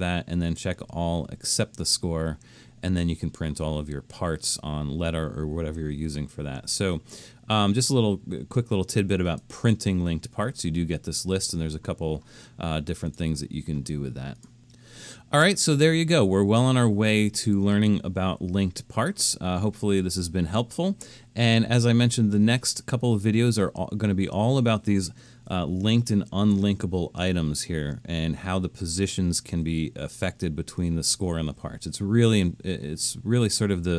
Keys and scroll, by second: 25.7 super+=, 26.2 super+=.